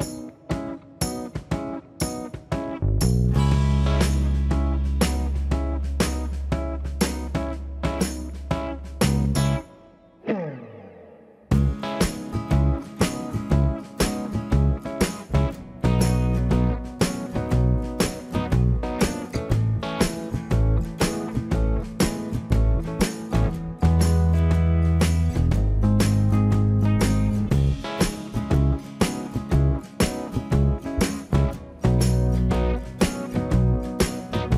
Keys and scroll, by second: 5.8 space, 6.8 j, 14.0 space, 16.2 Escape, 16.2 space, 20.1 space, 20.2 Escape, 26.4 space, 26.4 Escape.